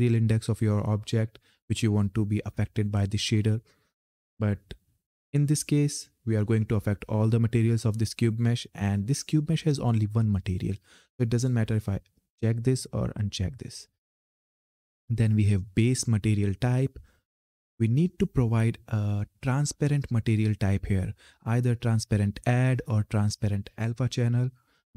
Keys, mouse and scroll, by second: 11.9 click.